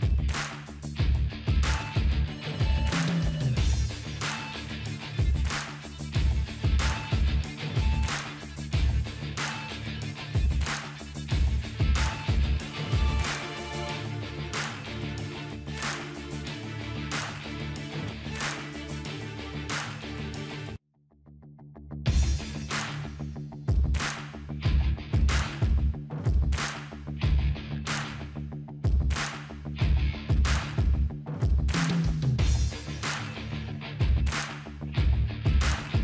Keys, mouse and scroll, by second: 1.7 click, 1.8 click, 4.1 typing, 5.3 click, 5.3 typing, 7.8-10.7 drag, 13.0-14.9 typing, 26.5-36.0 drag, 27.8 typing, 30.5-31.6 drag, 33.2-34.9 typing.